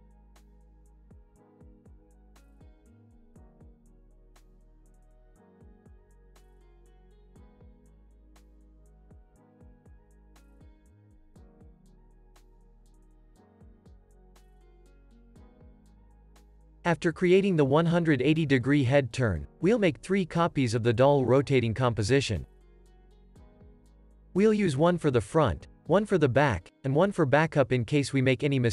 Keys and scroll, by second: 3.3 space, 7.0 Home, 8.9 Home, 9.3 End, 9.9 Home, 12.2 Home, 13.8 Home, 15.5 super+s, 20.5 super+s, 21.7 super+d, 23.3 super+d, 24.5 Down, 25.1 Return, 25.6 Right, 25.9 BackSpace, 27.2-28.6 typing.